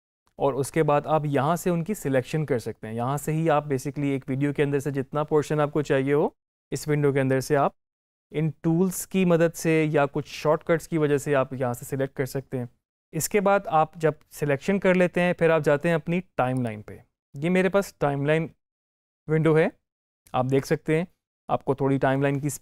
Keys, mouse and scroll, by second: 16.4 click.